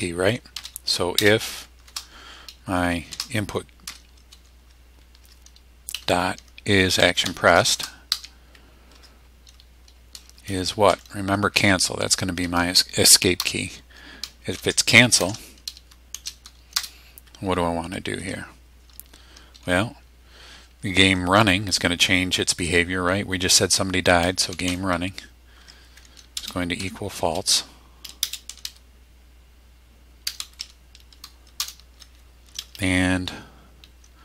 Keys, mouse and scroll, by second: 0.3-1.8 typing, 3.1 shift+i, 3.8 n, 5.2 Tab, 5.9-8.6 typing, 8.9 Tab, 10.9 Down, 13.4 Return, 14.6 shift+0, 16.1 shift+;, 16.8 Return, 18.2 Tab, 24.0-25.2 typing, 25.6 Tab, 26.4 space, 26.8 =, 28.2-31.1 typing, 31.6 Return.